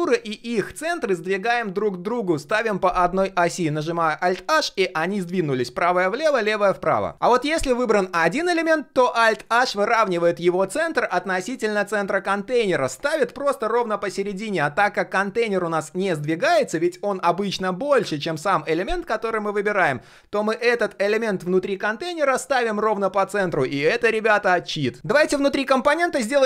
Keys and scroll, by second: 3.7 alt+h, 9.3 alt+h.